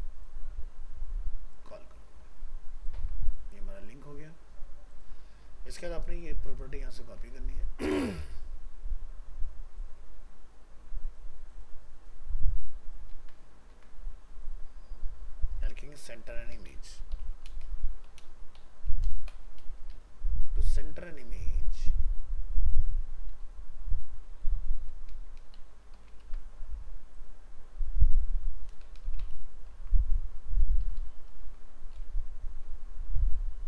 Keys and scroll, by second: 1.7 ctrl+v, 7.1 ctrl+c, 13.1 ctrl+v, 26.2 ctrl+c, 29.3 ctrl+v.